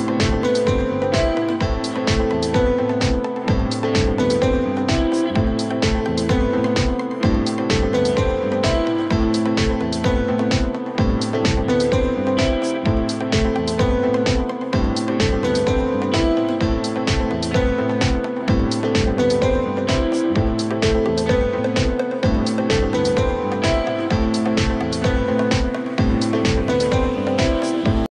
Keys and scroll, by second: 0.2 shift+5, 0.7 Return, 1.2 o, 1.4 f, 2.0 ctrl+space, 3.8 ctrl+k, 5.6 F2, 8.5 shift+c, 9.1 F4, 11.1 F2, 16.2 Escape, 20.4 F4, 20.6 F3, 20.8 Escape, 21.7 shift+F2.